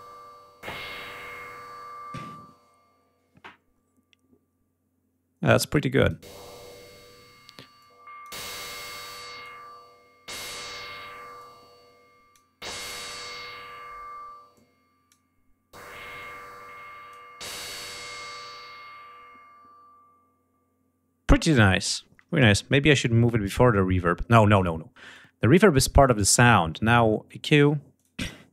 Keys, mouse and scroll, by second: 5.6 click, 7.7 click, 8.8 click, 11.3 click, 14.4 click, 16.1 click, 21.5 click, 22.7-24.4 drag, 24.7 right click, 27.7 click.